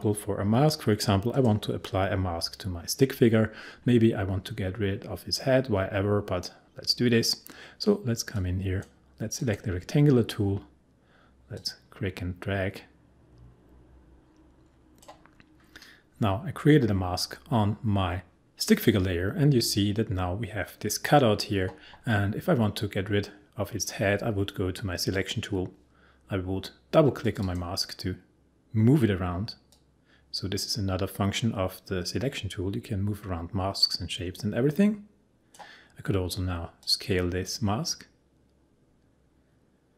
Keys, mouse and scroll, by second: 4.5-6.3 scroll up 1, 8.4-17.7 drag, 25.1 click, 29.6 click, 29.7-39.9 drag.